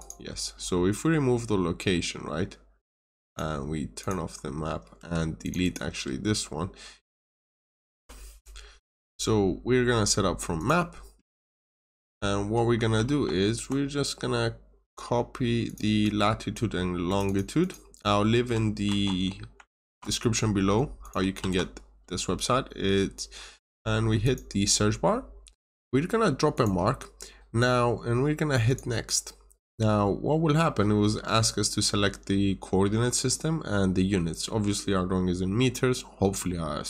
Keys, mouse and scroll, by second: 4.2 scroll down 1, 5.0 Escape, 5.3 click, 5.5 double click, 5.8 Delete, 6.8-7.5 typing, 7.9 Return, 10.5 click, 12.9 alt+Tab, 15.6 click, 15.9 double click, 17.0 click, 17.2 double click, 18.8 ctrl+c, 18.9 typing, 19.6 alt+Tab, 20.9 click, 21.3 typing, 24.1 click.